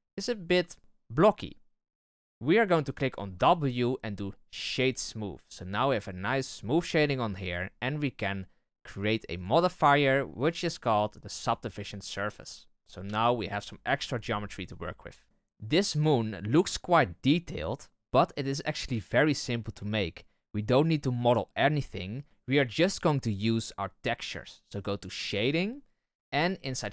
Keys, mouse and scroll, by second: 3.3 w, 9.3-13.0 drag, 13.0 z, 13.8 z, 25.3 click, 26.7 scroll up 4.